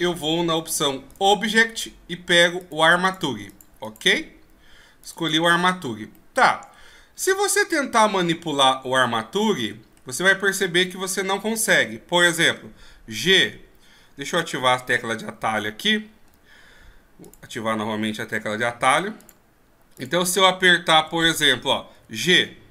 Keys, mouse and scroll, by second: 19.2-20.0 drag, 21.0 n, 21.9 g.